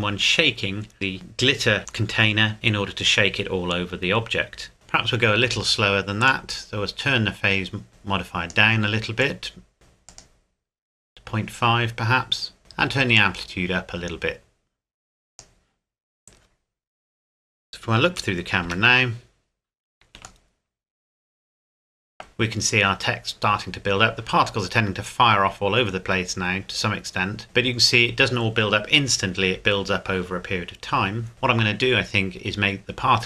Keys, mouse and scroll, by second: 0.9 middle click, 4.7 middle click, 6.3 click, 13.1 click, 18.6 KP_0, 20.5 shift+middle click, 26.8 scroll down 1, 27.4-28.0 scroll up 1, 30.5-31.7 scroll up 1, 32.4-32.9 scroll down 1, 32.9 scroll up 1, 33.1-33.2 scroll down 1.